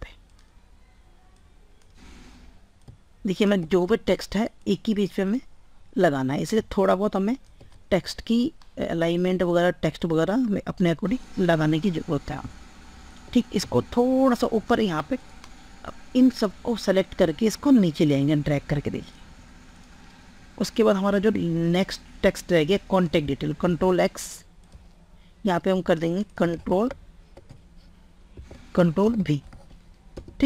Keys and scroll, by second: 23.6 ctrl+x, 26.6 ctrl+a, 27.9 ctrl+e, 28.9 ctrl+v.